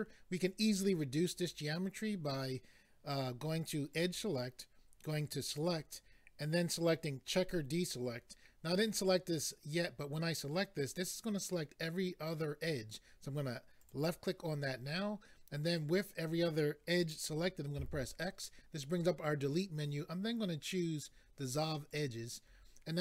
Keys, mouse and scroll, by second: 3.9 click, 5.5 click, 13.8 click, 21.9 click.